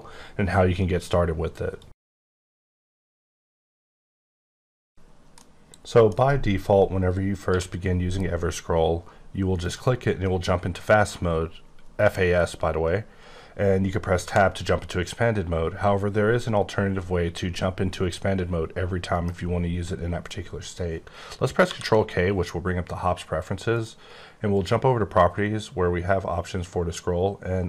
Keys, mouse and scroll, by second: 7.5 q, 9.6 click, 14.2 Tab, 19.1 right click, 21.6 ctrl+k, 23.7 click, 24.5 click.